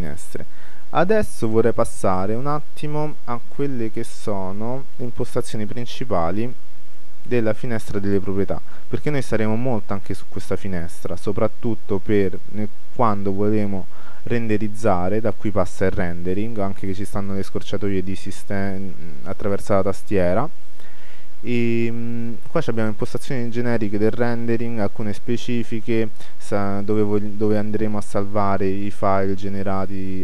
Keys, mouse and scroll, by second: 3.4-4.9 drag.